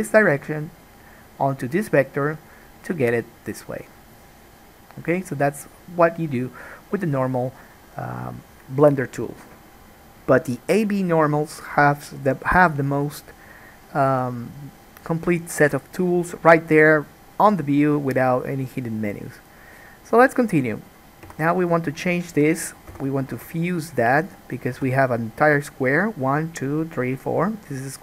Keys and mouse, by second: 21.4 3, 21.7 click, 21.8 shift+middle click, 22.2 shift+click, 22.3-28.0 shift+middle drag, 23.1 f, 23.4 alt+a, 24.9 1.